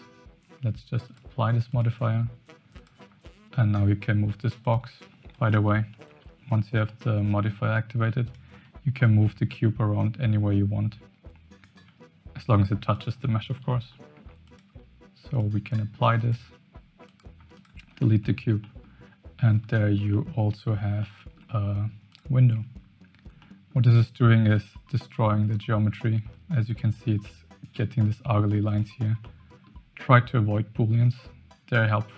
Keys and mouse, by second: 1.2 click, 2.7 click, 3.0 g, 5.3 ctrl+z, 6.9 middle drag, 8.2 click, 8.5 g, 13.4 ctrl+z, 13.9-14.2 middle drag, 14.5 click, 15.4-16.3 drag, 17.0 click, 17.3 x, 18.0 shift+middle click, 18.6 middle click, 19.7 shift+middle click, 20.1 middle drag, 21.0-21.4 shift+middle drag, 22.5 Tab, 23.4 middle click, 24.5 click, 26.2 2, 26.6 click, 28.7 click, 29.2 middle click.